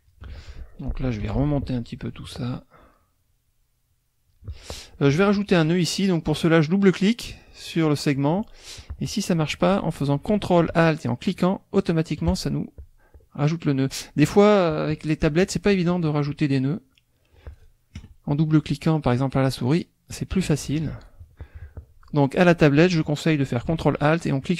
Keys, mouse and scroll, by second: 1.4 F2, 1.4 click, 2.0 click, 3.0-4.5 drag, 6.6 click, 7.2-8.9 drag, 11.3 ctrl+alt+click, 12.2 ctrl+alt+click, 12.8-14.7 ctrl+alt+drag, 15.7-17.2 drag, 19.6 click, 20.9 ctrl+z, 24.4 ctrl+alt+click.